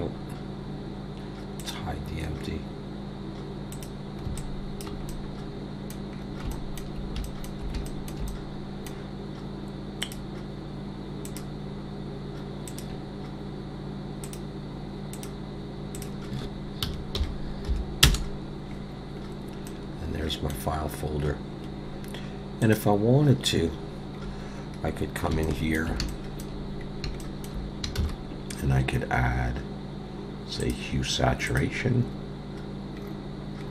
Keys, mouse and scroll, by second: 1.6 click, 4.3 click, 4.4 alt+click, 5.1 middle click, 6.2-6.5 scroll up 3, 6.5 shift+middle click, 7.2 middle click, 8.3 middle click, 10.0 click, 11.3 click, 12.7 click, 14.3 click, 15.1 click, 16.0 click, 19.7 middle click.